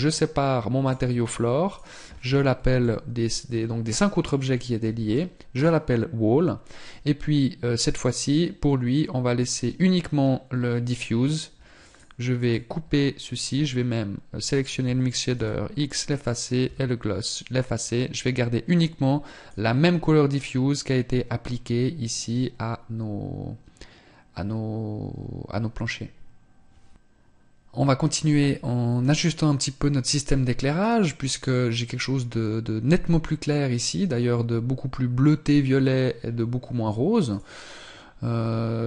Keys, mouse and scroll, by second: 0.7 click, 15.0 x.